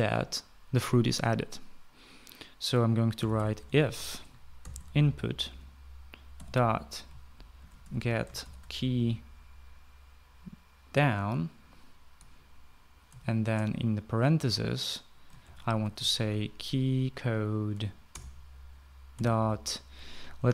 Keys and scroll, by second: 3.4-9.4 typing, 13.6 shift+9, 15.9-16.8 typing, 18.2 Down, 18.6 Return, 19.6 ..